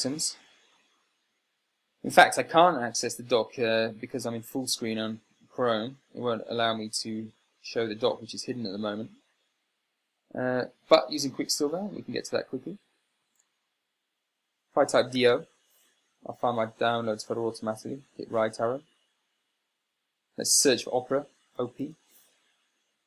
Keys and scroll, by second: 15.3-16.2 typing, 18.6 Right, 21.9 o, 22.2 p.